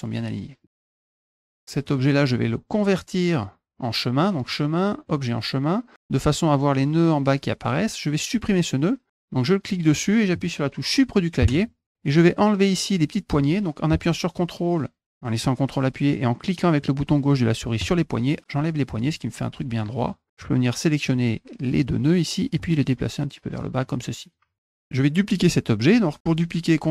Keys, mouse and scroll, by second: 0.6 middle click, 1.0 click, 1.5 click, 1.8 click, 2.4 click, 2.9 click, 4.4 click, 5.0 click, 8.3-9.9 drag, 12.1 middle click, 12.1 scroll up 2, 17.8 ctrl+click, 18.6 ctrl+click, 19.8 click, 20.3 click, 21.8 click, 23.0 ctrl+click, 24.2 click, 24.6 middle click, 24.6 scroll down 2.